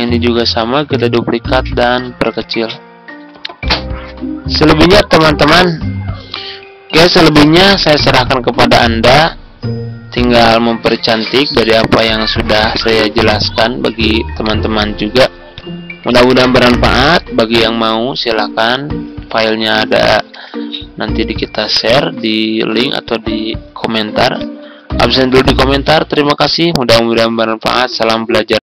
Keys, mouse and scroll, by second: 0.7 ctrl+d, 1.1 click, 2.3 ctrl+click, 3.6-5.4 drag, 10.4 F4, 10.9 click, 12.7 right click, 13.5 click, 14.4 right click, 15.5 click, 15.9 click, 17.0 Delete, 18.2-19.9 drag, 20.3 Delete, 21.8-22.5 ctrl+scroll down 1, 22.9 click.